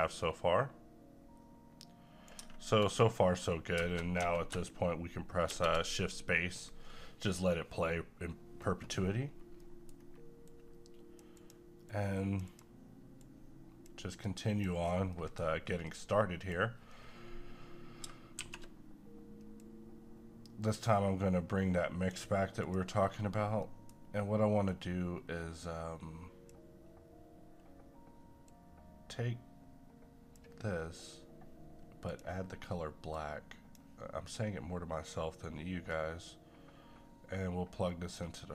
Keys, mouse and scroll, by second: 5.5 shift+space, 9.2-9.6 scroll down 1, 9.6 middle click, 9.9-10.5 scroll up 1, 10.5-14.9 drag, 14.9 scroll down 1, 15.1-18.4 middle drag, 18.4 a, 19.6-22.6 drag, 23.2-23.6 scroll up 1, 23.6 middle click, 24.0-24.6 scroll up 1, 24.6-35.9 drag, 35.9-38.5 drag.